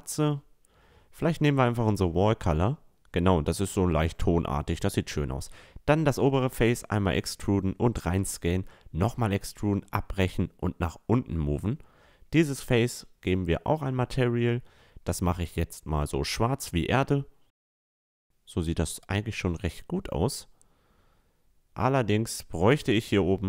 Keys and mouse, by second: 0.1-1.9 drag, 2.0-3.9 middle drag, 2.4 Tab, 3.9 click, 4.4-5.8 right drag, 6.0 e, 6.5 s, 8.1 e, 9.3-10.8 drag, 10.7 a, 11.0-12.6 right drag, 12.1 click, 13.9-15.6 drag, 15.3 Tab, 15.8-16.3 drag, 16.0 a, 16.5-16.9 drag, 16.5-20.2 middle drag, 20.2-22.3 right drag, 21.2 Tab, 22.3-23.4 drag, 22.9 right click.